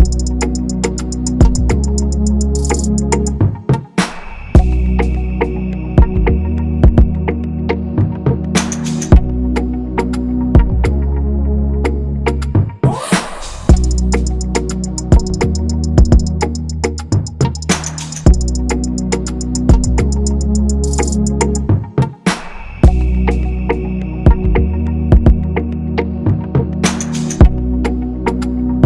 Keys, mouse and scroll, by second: 5.0-5.8 typing, 12.7 g, 22.3 g.